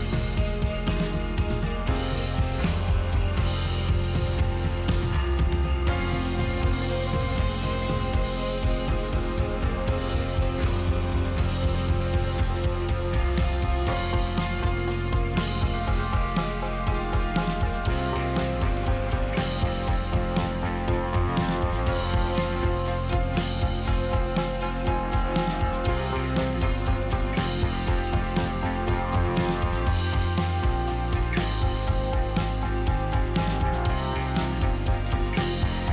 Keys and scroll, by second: 2.1 Return, 2.7 n, 3.8 space, 4.8 space, 8.1 space, 11.1 space, 13.2 x, 14.5 n, 20.4 m, 22.7 Escape, 27.4 space, 28.0 space, 29.1 space, 31.9-34.6 typing.